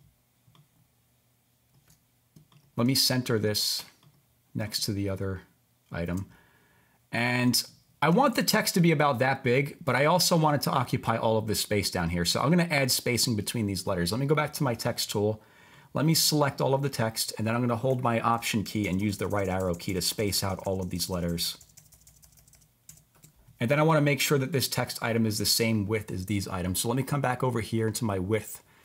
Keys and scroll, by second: 18.8 alt+Right, 19.0 alt+Right, 19.1 alt+Right.